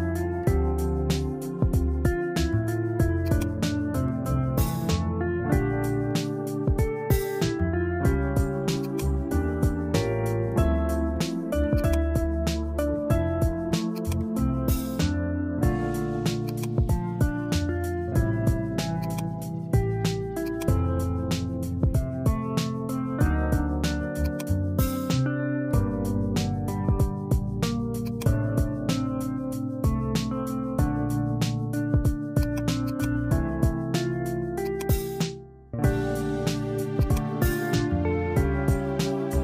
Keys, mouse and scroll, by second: 0.4 BackSpace, 0.5 BackSpace, 3.3 click, 6.0-8.6 middle drag, 8.9-11.5 drag, 11.9-16.6 drag, 19.1-20.5 drag, 21.8-32.6 drag, 32.9 click, 34.7-39.4 drag.